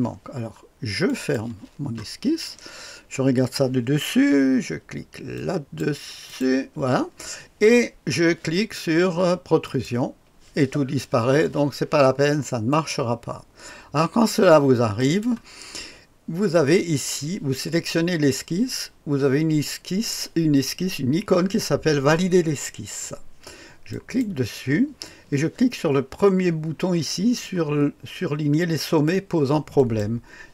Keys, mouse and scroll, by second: 1.1 click, 5.3 click, 6.3 click, 9.6 click, 12.7 click, 15.0 click, 15.3 click, 23.9 click, 29.8 click.